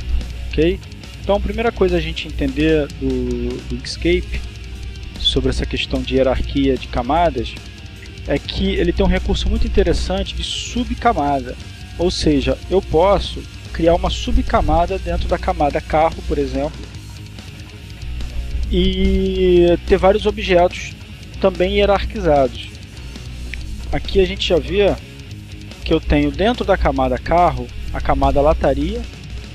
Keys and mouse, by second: 0.6 click, 5.0 click, 7.1 click, 8.6 click, 9.3 click, 14.6 click, 16.0 click, 22.6 click, 23.6-24.6 drag, 26.3 click, 27.2 click.